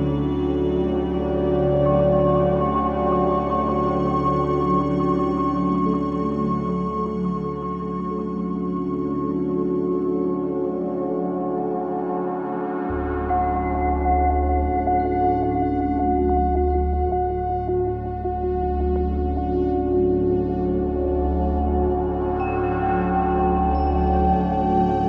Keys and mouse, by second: 0.0 e, 1.2 Escape, 2.1 s, 5.0 ctrl+click, 5.6-7.4 ctrl+alt+drag, 8.6 s, 10.6 Escape, 13.1 m, 14.8 click, 19.8-25.0 alt+drag.